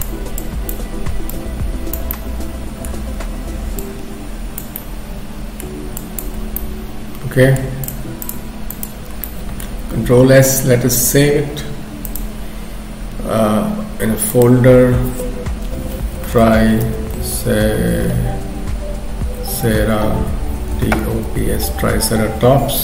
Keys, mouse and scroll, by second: 0.4 click, 2.1 middle click, 3.0-3.5 scroll up 2, 3.8 click, 4.8 middle click, 6.0 click, 6.4 scroll down 3, 6.6 middle click, 7.9 shift+click, 8.2 shift+click, 9.2 middle click, 9.2-9.6 scroll down 1, 10.0 ctrl+s.